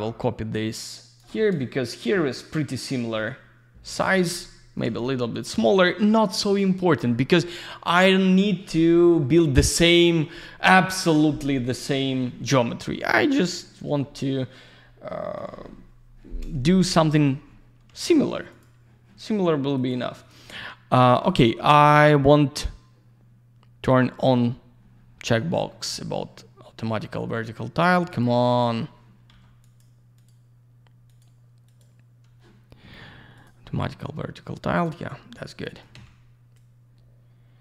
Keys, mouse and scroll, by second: 3.9 click, 5.3 click, 6.3 click, 14.0 alt+middle click, 18.5 click, 19.7 click, 20.2 click, 21.2 click, 28.1 click, 28.5 click, 28.6 double click, 29.3 q, 29.6 click, 30.1 click, 30.2 double click, 31.1 click, 33.3 click, 34.7 click, 35.2 middle click, 36.5 click.